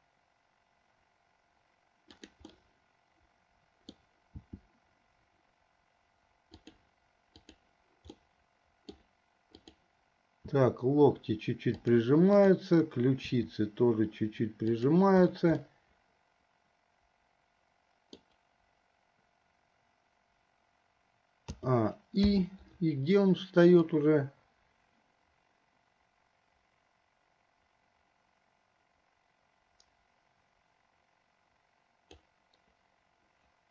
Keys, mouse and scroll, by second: 2.8-4.3 middle drag, 4.5 r, 7.7 click, 8.4 middle click, 10.7 r, 12.6 click, 13.5 r, 15.9-18.5 middle drag, 21.7 a, 22.6 i, 24.1-32.5 drag.